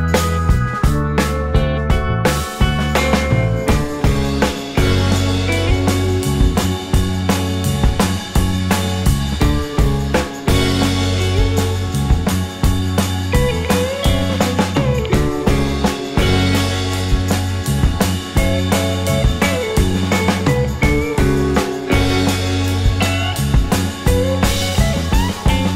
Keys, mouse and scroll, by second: 2.7-7.3 scroll up 1, 7.3 scroll down 1, 7.6 alt+middle click, 7.9-8.3 alt+scroll up 2, 19.2 scroll down 2, 19.5 alt+middle click, 19.7-20.1 alt+scroll up 2, 21.1 shift+click, 23.7 scroll down 1, 23.8 scroll up 1, 23.9 alt+scroll, 24.1-24.8 alt+scroll up 4, 24.2 alt+middle click, 24.8-25.1 scroll down 1, 25.1 right click.